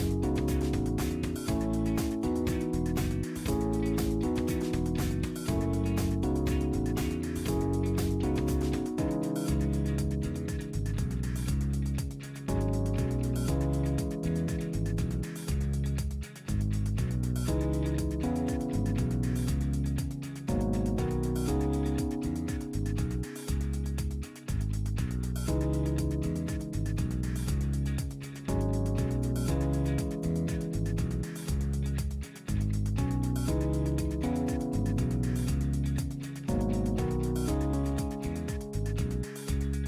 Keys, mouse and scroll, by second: 0.5 KP_1, 0.7 KP_5, 1.1 KP_Enter, 3.1-4.2 drag, 4.9 click, 6.1 click, 6.9 KP_5, 7.3 KP_Enter, 9.4-10.5 drag, 11.2 click, 12.5 click, 13.9 KP_3, 14.3 KP_Enter, 15.9-18.0 drag, 19.0 click, 20.1 click, 21.2 KP_3, 21.5 KP_Enter, 23.0-24.7 drag, 26.0 click, 27.3 click, 28.3 KP_7, 28.9 KP_Enter, 30.8-31.9 scroll down 6, 32.5-33.3 middle drag, 33.3 scroll down 1, 34.5 scroll up 1, 35.1-35.9 scroll up 4, 36.9 click, 38.3 click, 39.3 KP_5, 39.7 KP_Enter.